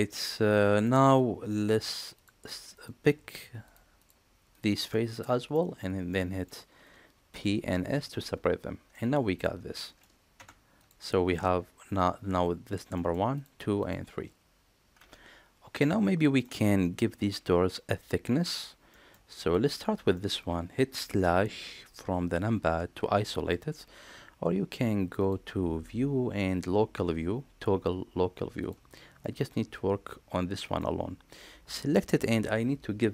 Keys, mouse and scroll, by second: 0.0 middle click, 2.1 click, 2.7 click, 4.4 shift+click, 4.8 middle click, 5.5 shift+middle click, 6.0 middle click, 7.2 p, 8.8 middle click, 9.7 middle click, 10.3 Tab, 10.7 click, 12.9 middle click, 14.8 Tab, 15.8-16.3 middle drag, 18.8 middle click, 19.3 click, 20.0 middle click, 25.1-28.6 drag, 29.1-30.7 middle drag.